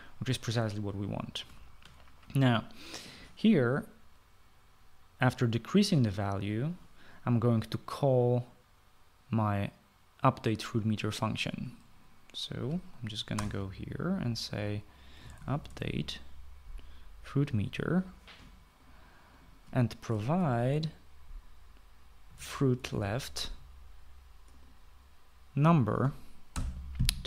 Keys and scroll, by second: 2.4 ctrl+s, 14.3 ctrl+s, 14.3 Return, 15.8-17.3 typing, 21.3 shift+9, 23.0-24.5 typing.